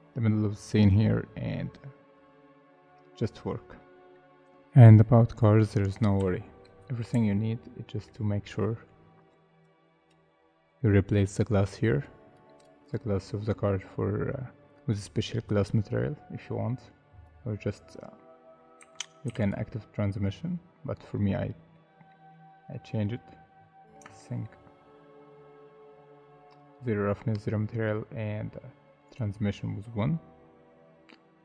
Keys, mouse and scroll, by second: 1.5 middle click, 6.2 /, 7.3 z, 7.8 middle click, 8.3 scroll up 1, 12.8 double click, 13.3 middle click, 18.8 Tab, 19.3 3, 21.7 middle click, 22.3 scroll down 1, 22.9 middle click, 23.5 scroll up 1, 24.0 Tab, 24.2 middle click, 24.9 scroll up 1, 31.1 scroll down 1.